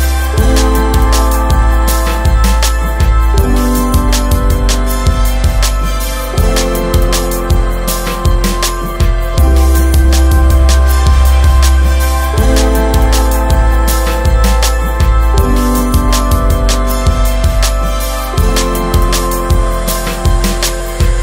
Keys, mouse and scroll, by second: 0.7 click, 2.3 right click, 3.2-3.5 scroll down 1, 3.8 right click, 4.3 Escape, 4.6 right click, 8.1 click, 10.1 right click, 12.1 click, 13.2 right click.